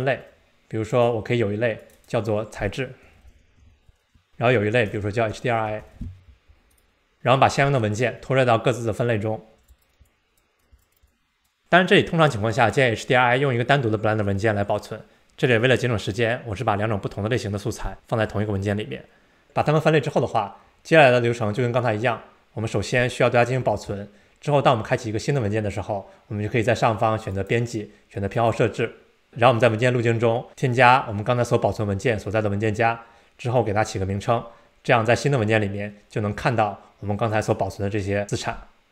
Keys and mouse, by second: 1.8-6.8 drag, 9.6 drag, 10.1 click, 11.1-11.5 drag, 23.7 super+s, 27.4-29.1 drag.